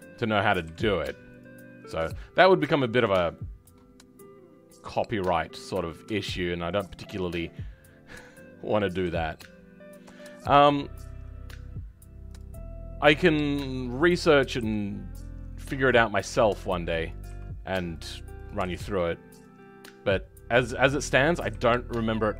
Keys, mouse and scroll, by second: 0.6 g, 8.2 click, 9.0 g, 14.4 click, 14.6 g, 17.0 click, 17.2 g, 18.4 click, 18.6 g, 21.0 click, 21.4 g.